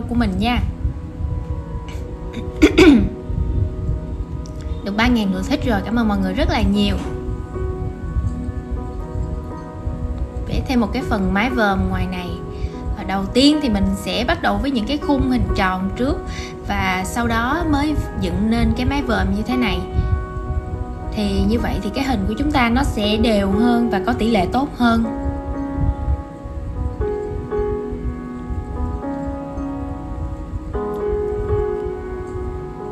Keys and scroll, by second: 1.7 super+z, 2.0 super+}, 4.3 super+c, 4.4 shift+super+v, 4.5 super+z, 5.3 super+c, 5.4 shift+super+v, 6.1 super+c, 6.3 shift+super+v, 12.0 super+c, 12.1 shift+super+v, 13.0 super+z, 16.4 super+z, 19.5 super+z, 20.8 super+a, 22.0 super+z, 22.1 super+g, 23.6 super+c, 23.6 shift+super+v, 26.2 super+z, 32.2 super+z.